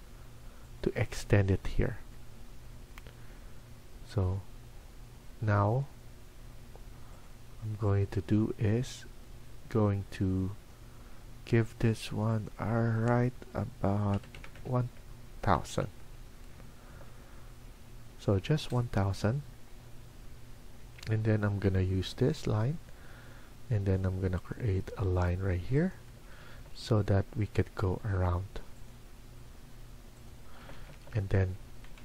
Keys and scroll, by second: 13.8-16.0 typing, 16.7 Escape, 17.1 Escape, 25.9 Escape, 26.3 Escape, 26.5 Escape, 30.5 Escape, 30.7 Escape, 30.9 Escape, 31.5-32.0 typing.